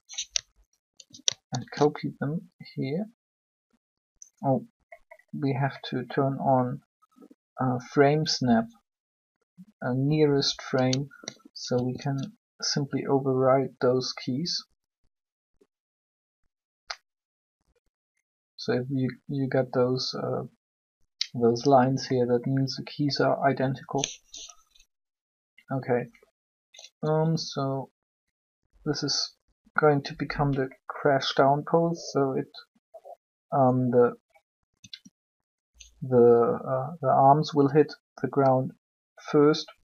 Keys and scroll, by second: 1.5 shift+d, 11.7 shift+d, 27.0 r, 34.7 r.